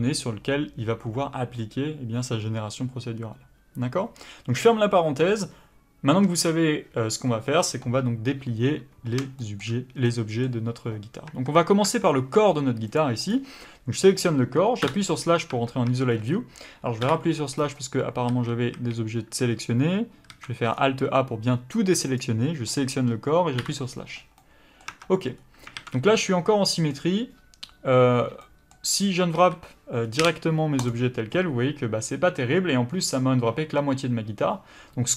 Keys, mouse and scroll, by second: 9.4 shift+middle click, 11.3 Tab, 12.9 click, 14.8 KP_Divide, 15.5 Tab, 16.1 scroll up 1, 17.0 KP_Divide, 17.5 scroll up 1, 18.3 a, 20.3 alt+a, 20.6 scroll down 1, 22.2 click, 23.6 KP_Divide, 24.4 middle click, 24.9 Tab, 25.3 scroll up 1, 25.7 alt+a, 26.0 middle click, 29.3 a, 30.9 u.